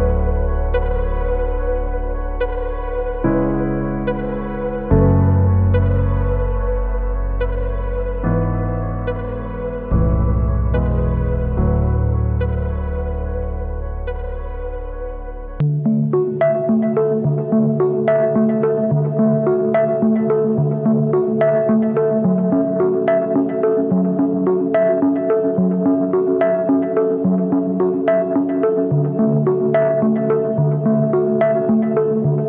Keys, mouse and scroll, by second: 10.6 double click, 13.2 e.